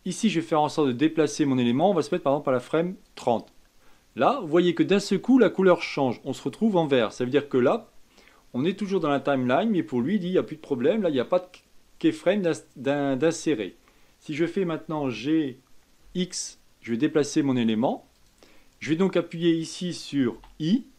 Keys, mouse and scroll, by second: 0.9-4.0 drag, 14.9 g, 20.3 i.